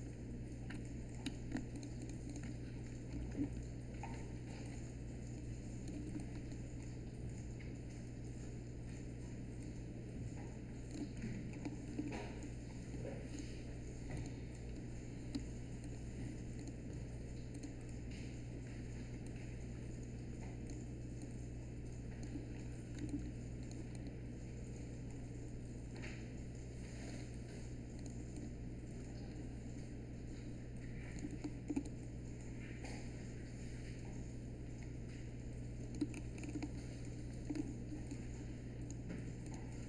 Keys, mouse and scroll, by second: 1.2 q, 3.1 r, 15.3 w, 23.0 space.